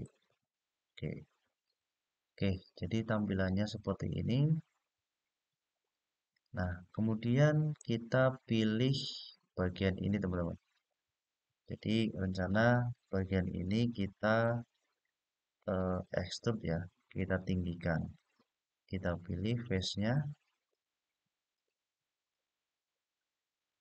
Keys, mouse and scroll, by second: 1.4 click, 2.5-7.5 middle drag, 10.4 click, 14.1 click, 15.6 click, 16.8 shift+click, 18.1 shift+click, 19.0 shift+click, 19.7 shift+click, 20.4 shift+click, 21.2 shift+click, 22.0 shift+click, 23.3 shift+click.